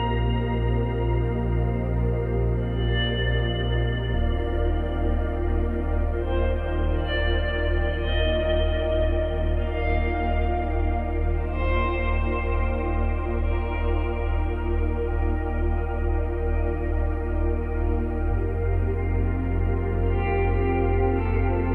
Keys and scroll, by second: 0.0 space, 3.6 ctrl+z, 6.8 space, 11.2 space.